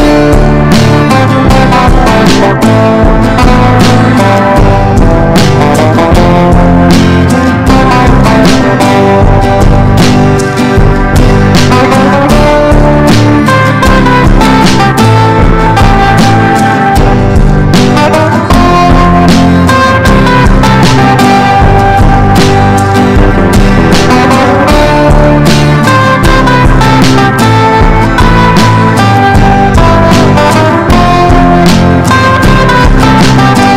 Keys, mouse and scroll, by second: 0.0-13.6 drag, 14.0 ctrl+g, 14.7 ctrl+click, 16.2 click, 17.3 Down, 17.6 typing, 19.3 click, 20.0 ctrl+shift+g, 20.9 click, 21.5 ctrl+shift+g, 22.4 click, 24.5 ctrl+shift+g, 26.3 click.